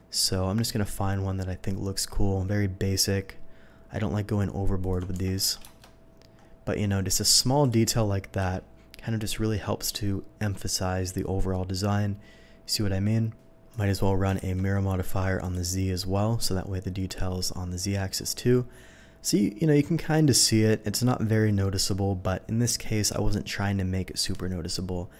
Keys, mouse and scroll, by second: 2.2-4.8 scroll down 1, 4.8 click, 5.1 Tab, 5.4 a, 5.6 KP_0, 7.6 click, 8.3 z, 11.0 z, 13.7 click, 14.3 x, 15.4 click, 17.6 middle click, 18.2 middle click.